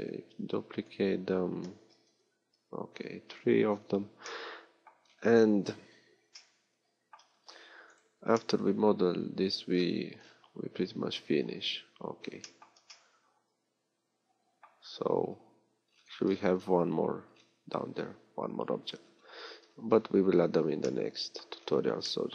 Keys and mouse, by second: 11.5 middle click, 19.7-21.7 middle drag.